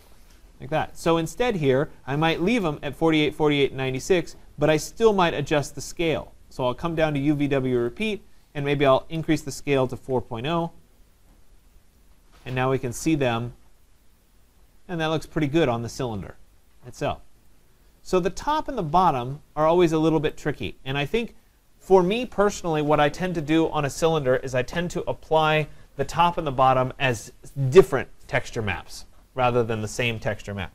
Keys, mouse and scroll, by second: 5.2 click, 8.1 click, 8.8-10.0 typing, 10.0 Tab, 12.5 click, 17.5 right click, 18.0 middle click, 18.1 middle click, 18.2 middle click, 19.1 middle click, 19.2 middle click, 20.3 right click.